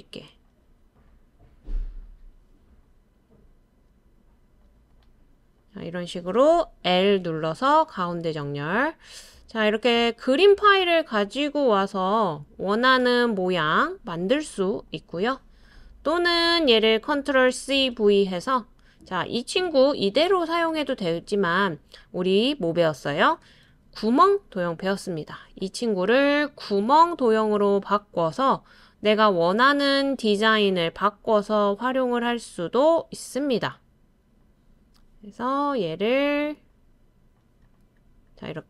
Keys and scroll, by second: 6.9 |, 17.6 super+c, 17.8 super+v, 23.7 super+c, 24.0 super+v.